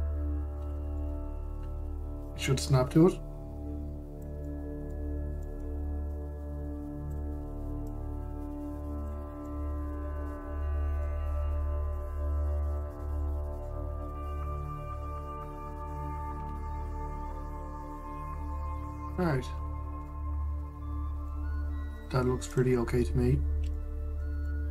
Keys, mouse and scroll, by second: 0.1 KP_Decimal, 1.3-1.6 scroll, 1.6-2.9 middle drag, 2.9 click, 5.1-6.8 middle drag, 6.8 click, 8.5 click, 10.1-12.6 middle drag, 12.6 click, 13.9-15.1 middle drag, 15.1 click, 17.0 KP_Decimal, 18.2 click, 18.6-20.1 middle drag, 20.1-20.7 scroll up 2, 20.7-22.6 middle drag, 22.6 click, 23.2 click, 23.7-24.4 scroll down 1, 24.4-24.7 shift+middle drag.